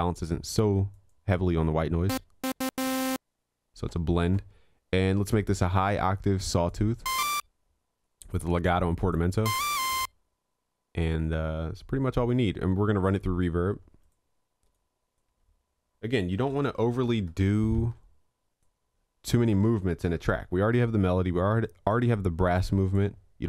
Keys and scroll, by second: 20.4 ctrl+l.